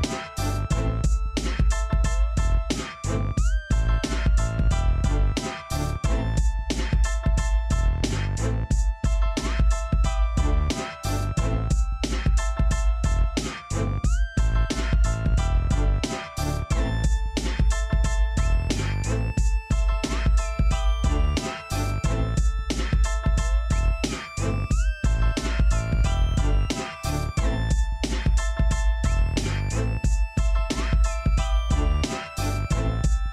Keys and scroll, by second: 18.1-19.0 typing, 19.1 ctrl+v, 23.4 z, 25.1 p, 32.9 |.